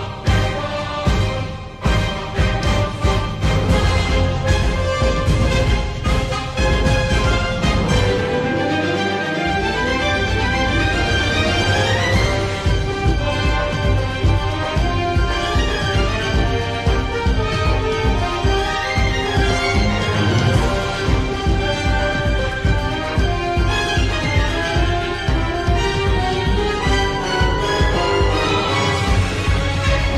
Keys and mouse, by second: 4.9 g, 9.7-11.2 drag, 11.8 shift+middle click, 13.9 g, 17.9 g, 26.4 2.